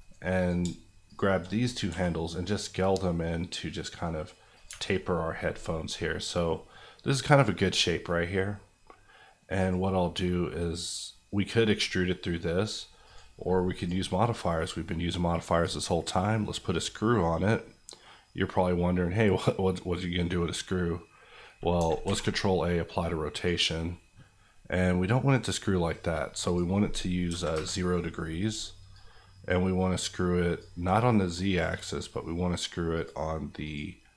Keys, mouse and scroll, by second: 0.4 click, 1.9 s, 4.5 click, 4.7 Tab, 8.0 middle click, 9.5 click, 21.8 ctrl+click, 22.0 ctrl+a, 23.0 click, 27.3 KP_0, 27.5 KP_Enter, 28.9-30.8 drag, 30.9 middle click, 32.9 click.